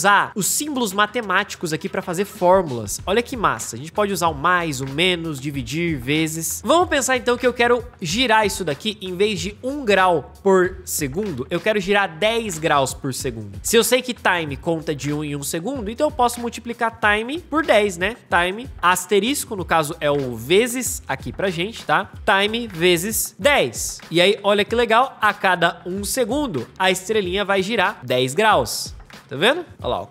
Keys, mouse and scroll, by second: 29.7 space.